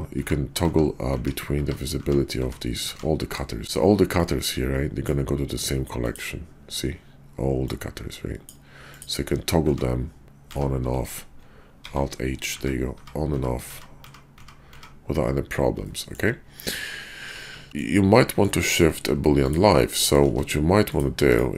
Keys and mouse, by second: 3.6 ctrl+z, 5.6-9.3 drag, 9.6 shift+2, 11.8 alt+h, 12.5 shift+2, 14.0 shift+2, 14.2 shift+2, 15.8-16.2 drag, 17.2-17.7 ctrl+z, 17.7 click, 18.3 shift+middle drag, 18.7 middle click, 19.2 x, 19.9 middle click, 20.3 ctrl+z, 21.2 x.